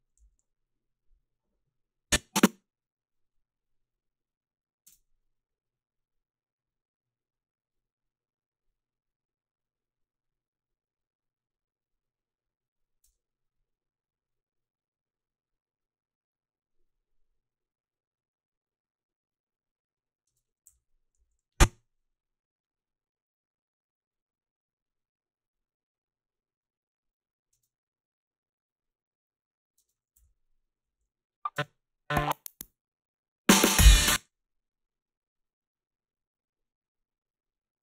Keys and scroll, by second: 0.2 a, 4.9 space, 13.0 space, 20.3 space, 20.7 h, 21.2 a, 27.5 space, 29.8 space, 30.2 h, 30.9 a, 31.5 space, 34.0 space, 34.3 h.